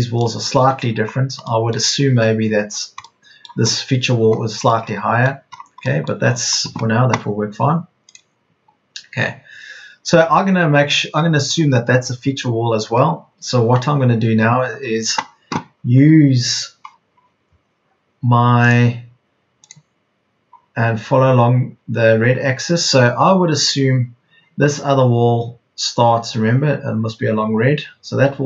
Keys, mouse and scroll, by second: 0.9 Escape.